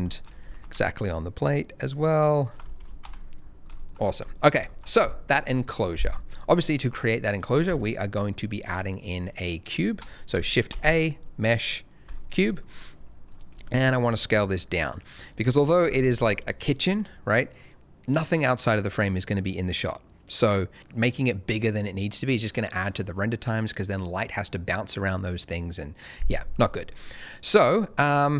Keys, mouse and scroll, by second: 0.0 shift+middle click, 0.4 g, 0.5 z, 2.6 shift+click, 2.6 middle click, 2.8 scroll down 1, 3.0 alt+a, 3.3-3.6 scroll down 1, 3.7 shift+middle click, 3.9-4.6 scroll down 2, 4.2 middle click, 7.6 shift+right click, 10.6 shift+a, 12.0 click, 12.4 scroll down 1, 12.6 middle click, 13.5 s, 15.2 click, 26.7 middle click.